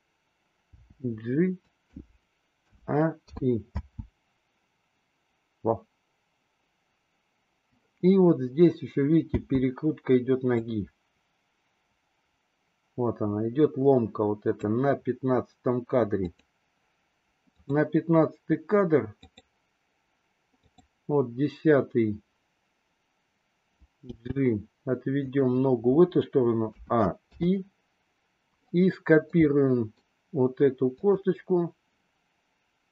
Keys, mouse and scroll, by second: 0.6 g, 2.6 a, 3.4 i, 3.6 space, 9.3 space, 10.5-14.6 drag, 16.2 click, 17.6 click, 19.2 click, 20.6 click, 24.0 g, 26.7 a, 27.2 i, 29.4-30.0 middle drag, 30.9 click.